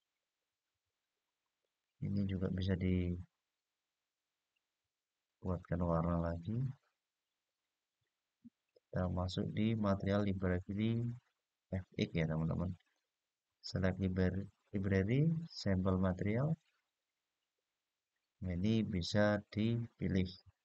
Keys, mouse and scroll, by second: 1.3 click, 5.0 click, 6.5-8.0 scroll down 8, 8.0-8.8 scroll down 3, 10.1 click, 10.1 scroll down 3, 10.9-12.7 scroll down 4, 12.7-15.8 drag, 17.7-18.3 scroll down 1, 18.3-19.3 scroll up 2, 19.3-20.6 scroll up 1.